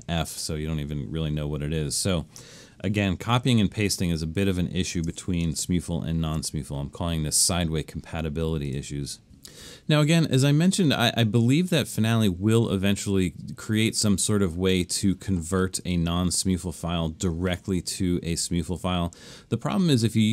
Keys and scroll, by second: 3.3 super+z, 5.7 super+-, 6.2 super+-.